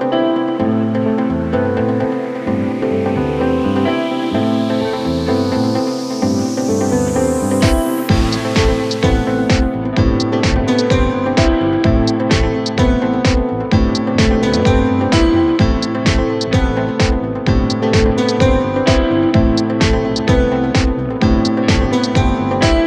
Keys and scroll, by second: 1.4-2.2 typing.